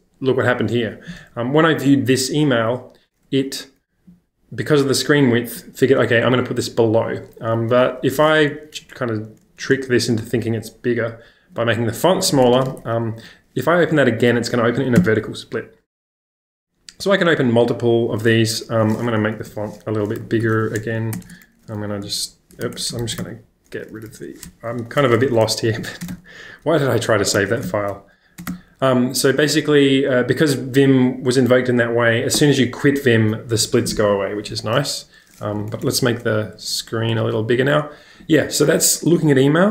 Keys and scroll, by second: 8.6 super+-, 8.8 super+-, 8.9 super+-, 9.2 super+-, 12.5 BackSpace, 12.5 ctrl+space, 12.7 ctrl+k, 15.0 Return, 15.0 Return, 19.2 super+=, 19.3 super+=, 19.5 super+=, 20.3 super+=, 20.8 Escape, 21.1-23.9 typing, 21.3 ctrl+space, 25.2 ⟲, 25.3 Escape, 26.0 space, 26.1 x, 27.4 BackSpace, 27.5 ctrl+space, 27.6 j, 28.4 space, 28.5 ctrl+j, 35.5 super+=, 35.7 super+=, 35.8 super+=, 36.0 super+=.